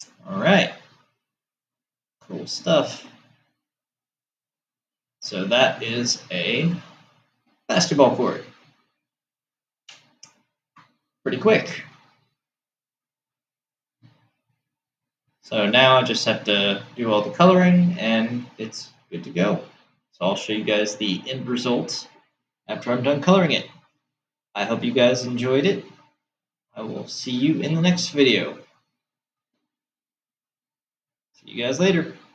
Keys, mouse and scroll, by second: 1.0-4.3 middle drag, 6.2-9.3 middle drag.